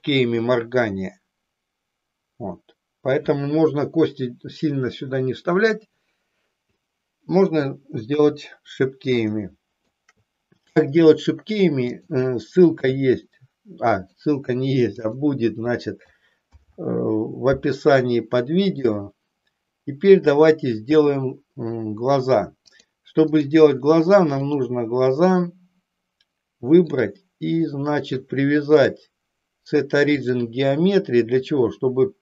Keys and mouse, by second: 8.1 KP_3, 9.4 shift+middle click, 11.7 click, 12.9 e, 14.0 click, 14.9 click, 16.3 alt+p, 22.8 click, 24.4 click, 26.9 click, 28.7-30.5 drag.